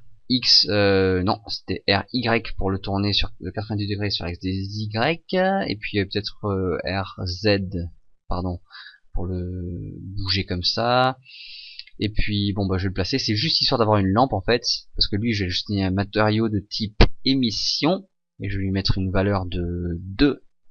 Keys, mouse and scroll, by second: 1.9 r, 5.5 click, 6.7 r, 10.3 click, 12.9 click, 14.0 click, 15.5 click, 16.5 click, 18.8 click.